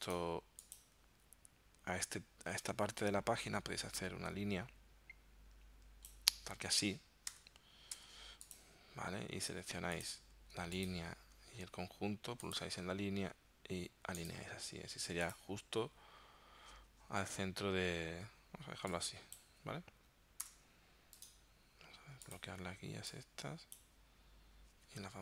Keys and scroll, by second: 7.3 d, 8.0 v, 20.5 BackSpace.